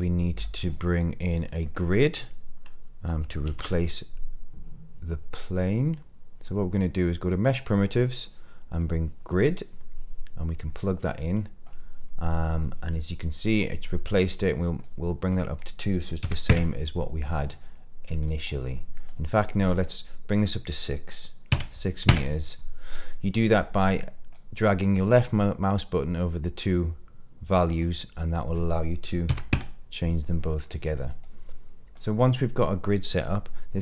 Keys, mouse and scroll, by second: 0.3 click, 0.6-1.3 drag, 1.6 click, 3.4 shift+a, 10.5-11.6 drag, 14.1-14.7 scroll up 1, 14.7-16.4 drag, 18.1-19.2 drag, 19.8-22.0 drag, 24.2-29.5 drag, 30.6-31.9 scroll down 2, 31.9 click, 32.5 middle click.